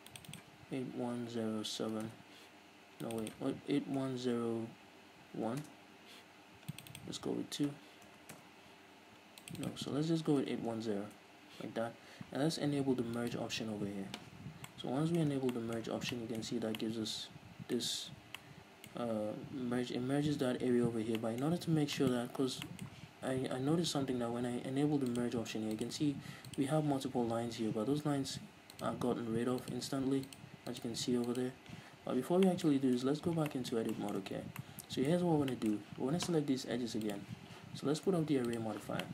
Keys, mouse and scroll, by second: 2.3 Return, 5.8 Return, 8.6 Return, 11.3 Return, 14.6 scroll down 2, 14.8-25.4 middle drag, 15.5 scroll down 2, 16.7 z, 17.9 scroll up 1, 18.2 z, 21.0-21.4 scroll up 1, 25.4-32.1 drag, 32.1-33.2 scroll down 3, 32.3 z, 32.7-37.3 middle drag, 33.2 Tab, 34.5 scroll down 2, 35.3-35.7 scroll up 2, 37.3-39.1 drag.